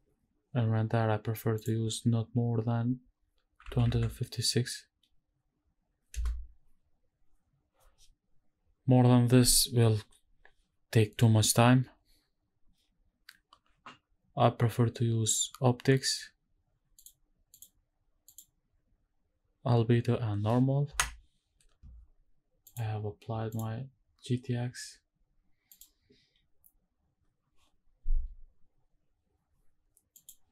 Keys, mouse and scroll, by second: 1.6-6.2 drag, 16.9 click, 18.2-20.9 drag, 22.6-23.6 drag.